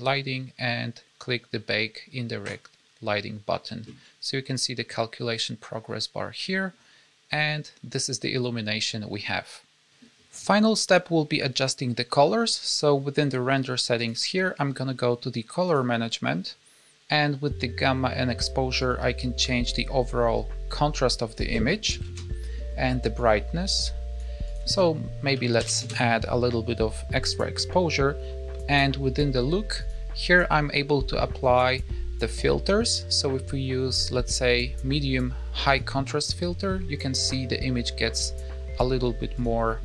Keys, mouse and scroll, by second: 2.3 click, 8.0-8.5 scroll up 1, 8.5-9.8 scroll down 1, 13.9 click, 15.6 click, 16.2-18.7 scroll down 5, 18.7-19.5 scroll down 1, 19.5 click, 21.2 click, 23.1 click, 24.4 click, 29.7 click, 38.1 click.